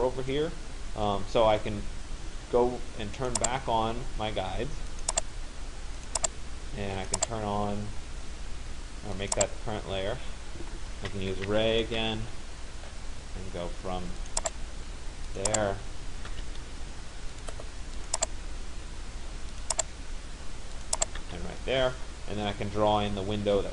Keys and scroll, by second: 11.1 r, 12.0 Return, 20.9 Return.